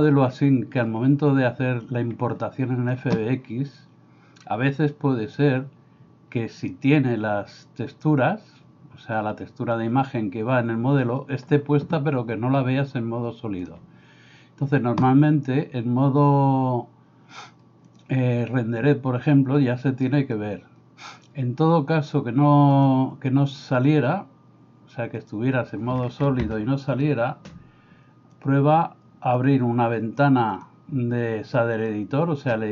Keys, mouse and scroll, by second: 4.8 click, 28.4-29.4 drag.